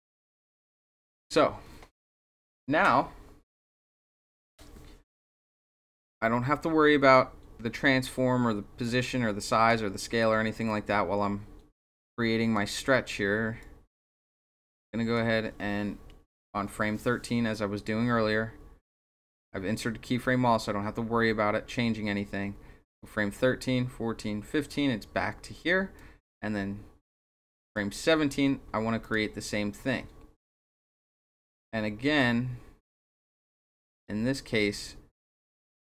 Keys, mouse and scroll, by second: 0.4 click, 6.0-7.1 drag, 8.8 click, 10.7-12.5 drag, 13.6-15.1 drag, 17.5-24.6 drag, 26.0-27.7 drag, 29.0 click, 30.8 click, 32.2 click, 34.7-35.9 drag.